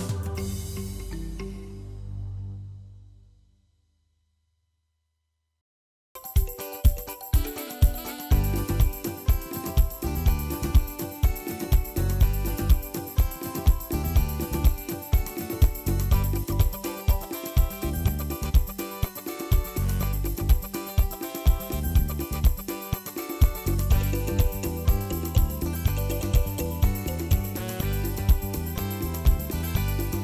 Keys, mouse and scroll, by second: 0.6 KP_Decimal, 1.2 shift+middle click, 1.8 shift+a, 3.3 click, 4.3 shift+middle click, 4.4 scroll up 1, 4.7 shift+a, 7.3 drag, 8.7 scroll up 4, 8.9 shift+middle click, 10.5 click, 11.5 ctrl+t, 12.1 middle click, 12.6 click, 13.3 scroll down 4, 14.8-15.9 drag, 15.9 KP_0, 16.2-17.3 scroll up 5, 17.3 click, 18.2-18.7 scroll down 4, 19.9-20.9 drag, 21.5-21.8 drag, 22.5-23.8 drag, 23.8 ctrl+s, 23.8-24.4 scroll down 14, 24.7 click, 25.5 ctrl+l, 26.0-27.4 drag, 27.4-27.8 scroll up 10, 27.9 middle click, 28.2 scroll down 4, 28.3 middle click, 28.8 click, 29.8 ctrl+s, 30.0-30.2 scroll up 3.